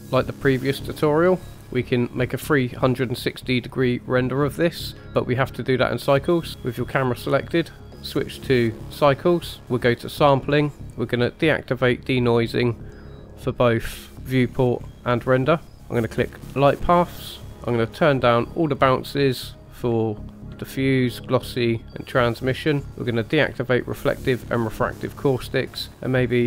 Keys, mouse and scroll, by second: 0.0 click, 1.0 click, 5.0 click, 6.2 click, 7.9-9.1 drag, 10.0 click, 11.6 drag, 11.6 scroll down 3, 12.8 click, 13.6-14.1 scroll up 2, 14.8-15.7 scroll down 1, 15.7-16.4 scroll down 2, 16.4 click, 16.8-18.2 scroll down 3, 18.2 click, 19.3 click, 21.3 click, 22.1 click, 23.4 click, 24.3 click, 25.0-26.4 scroll up 3.